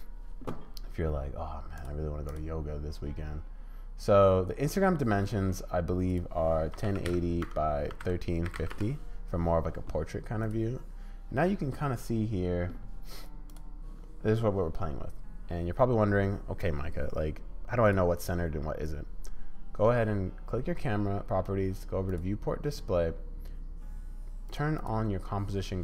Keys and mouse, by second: 1.8 click, 6.2-9.2 middle drag, 10.4 middle click, 17.8 click, 22.1 click, 24.8 click.